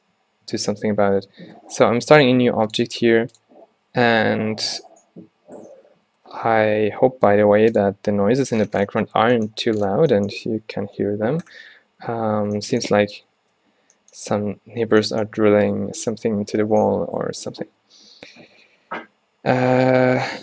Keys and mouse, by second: 0.6 Tab, 1.7 x, 3.4-5.1 drag, 8.7-10.4 middle drag, 11.1 z, 11.6 middle click, 12.3 middle click, 13.6 z, 17.5 t, 17.7 z.